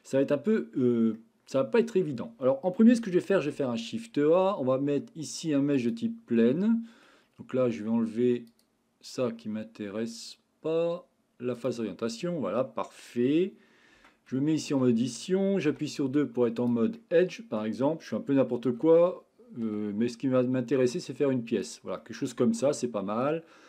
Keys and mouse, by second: 1.2-2.1 middle drag, 3.4 shift+a, 6.4-7.1 middle drag, 8.5-11.9 drag, 12.0-12.6 middle drag, 14.0 Tab, 14.5 shift+middle click, 15.7 2, 16.7 click, 17.1 middle click, 18.7 e, 19.6 z, 21.6 click, 22.0-23.6 middle drag.